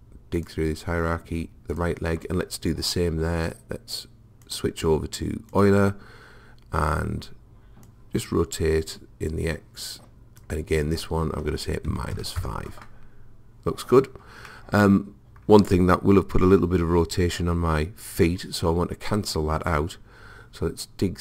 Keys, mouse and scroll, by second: 4.4 click, 7.9 click, 10.8 click, 14.5-16.3 middle drag.